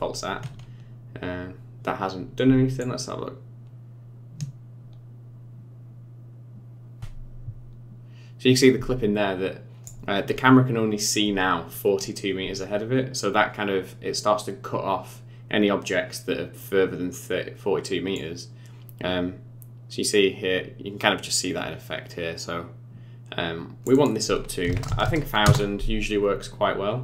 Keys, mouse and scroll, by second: 2.8 shift+click, 18.1 click, 23.9 click, 24.8 KP_0, 25.0 KP_0.